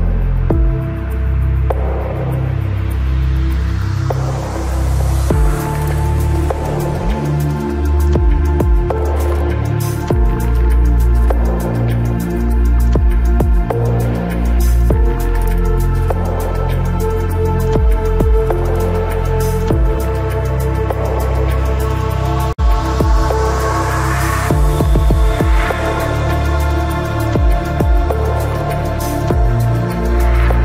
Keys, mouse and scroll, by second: 0.5 z, 1.3-2.6 drag, 2.6 KP_3, 4.9 ctrl+b, 10.8 Tab, 11.4 z, 18.8 Tab, 19.4-21.7 middle drag, 21.7-23.0 middle drag, 25.0 z, 25.5 z, 27.8 ctrl+Tab.